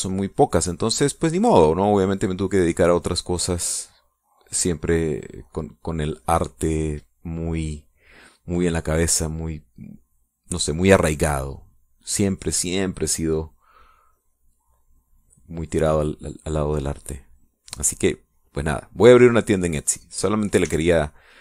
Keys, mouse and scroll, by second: 3.1-7.4 drag, 11.9 click, 12.7-16.5 drag, 19.2-21.3 drag.